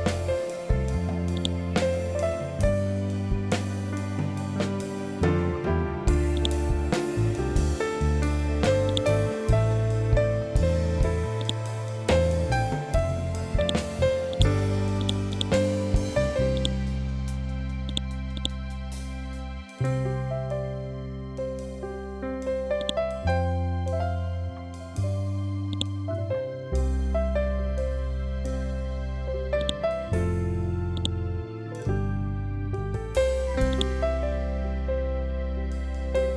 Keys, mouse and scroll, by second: 0.8-4.9 drag, 5.8 click, 8.3 right click, 10.9 click, 14.8 right click, 16.0 click, 19.7 scroll down 1, 22.2 click, 23.3 scroll down 1, 25.2-27.2 drag, 27.2 scroll down 1, 29.1 click, 30.5-36.3 ctrl+drag.